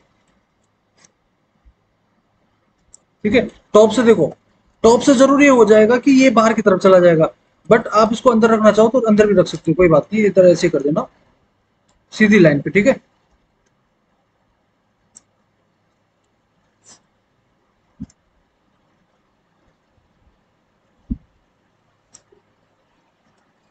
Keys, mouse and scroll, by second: 0.9-2.8 drag, 3.5 alt+w, 4.2 alt+w.